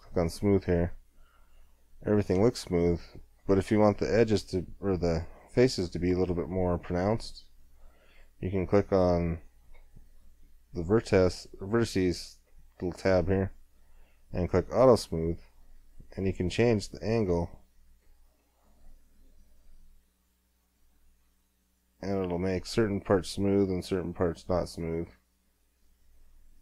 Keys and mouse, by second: 0.2 middle click, 0.4 middle click, 0.9 click, 1.3-6.1 middle drag, 6.4 middle click, 7.1-18.3 drag, 18.3-26.6 middle drag.